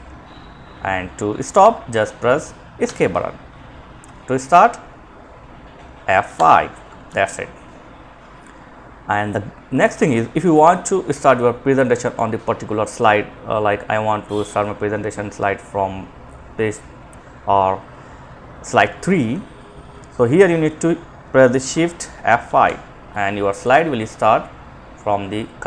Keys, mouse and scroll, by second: 2.0 Escape, 5.5 F5, 6.3 Escape, 9.2 click, 21.6 F5, 22.9 click.